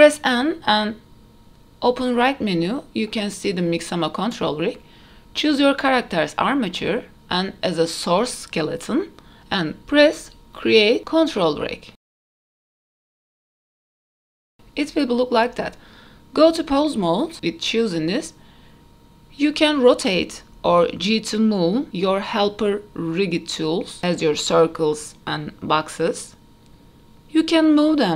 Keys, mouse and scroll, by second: 1.8 click, 6.4 click, 7.6-9.0 drag, 11.4-14.4 drag, 15.2 middle click, 15.2 n, 16.2-17.7 drag, 18.4 middle drag, 19.2 scroll up 1, 19.5 middle drag, 20.3 click, 21.2 r, 25.1 click, 25.4 middle click, 26.1 g, 27.8 r.